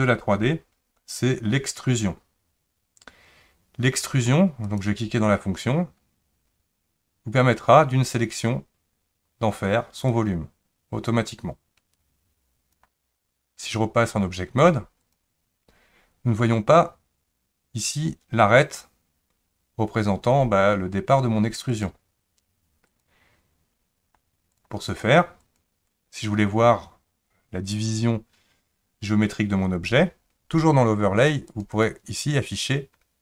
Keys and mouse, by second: 4.6 click, 10.1 click, 10.3-12.8 drag, 14.7 click, 21.7-23.1 drag, 24.5 click, 25.0 click, 31.3 click, 31.7-33.2 drag.